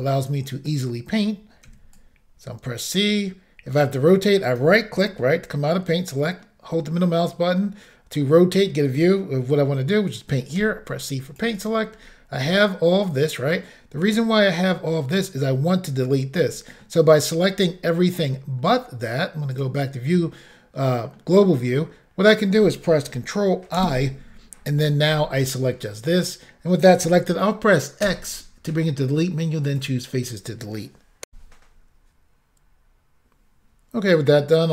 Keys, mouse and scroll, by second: 0.2 middle click, 1.7 c, 2.0 click, 4.5 right click, 5.3 shift+middle click, 6.4 middle click, 10.6 c, 10.9 click, 11.6 right click, 12.0-12.4 scroll down 1, 12.4 middle click, 14.0 middle click, 16.5 middle click, 18.6-19.6 scroll down 1, 19.6 click, 20.2 middle click, 23.8 ctrl+i, 28.1 x, 29.7 click, 31.3 Insert.